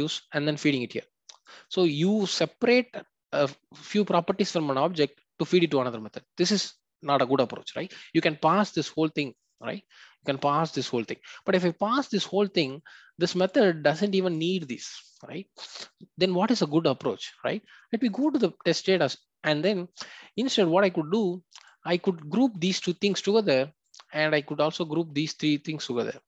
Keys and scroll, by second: 18.1 ctrl+b.